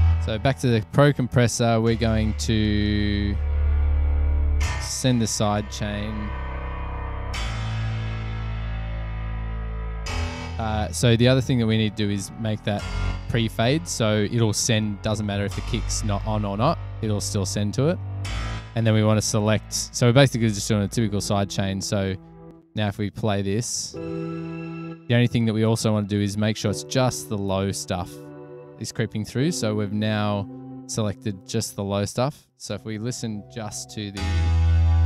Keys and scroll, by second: 22.6 space, 22.8 space, 29.4 super+=, 32.2 space, 32.8 space, 33.3 super+=.